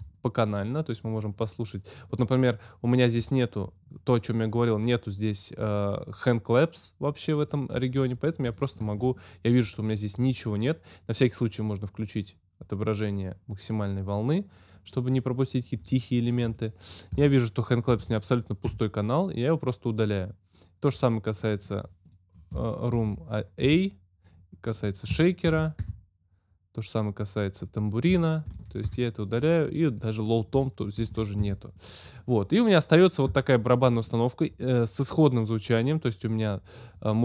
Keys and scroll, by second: 17.8 super+BackSpace, 18.6 super+Return, 19.1 Return, 22.9 super+BackSpace, 23.6 super+Return, 24.2 Return, 25.4 super+BackSpace, 25.8 super+Return, 28.4 super+BackSpace, 28.8 super+Return, 29.7 Return, 31.0 super+BackSpace, 31.4 super+Return, 32.2 Return.